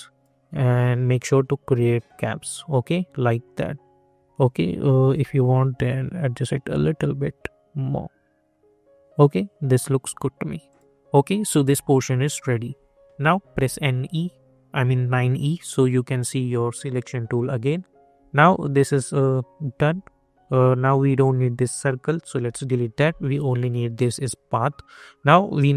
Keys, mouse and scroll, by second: 3.5 scroll down 1, 4.9 ctrl+z, 5.5-10.6 drag, 11.1 scroll down 1, 11.6-13.4 alt+drag, 13.2-14.1 typing, 17.4 click, 18.5-20.9 alt+drag, 23.1 click.